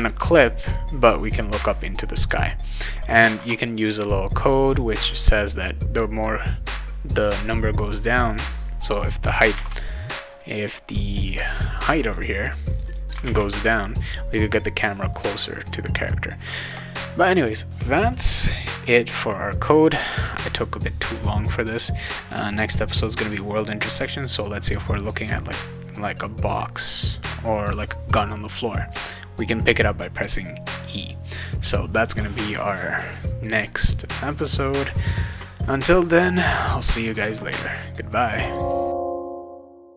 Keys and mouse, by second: 3.3 ctrl+s, 9.5 alt+Tab, 12.0 click, 12.2 click, 12.7 click, 12.9 click, 13.2 alt+Tab.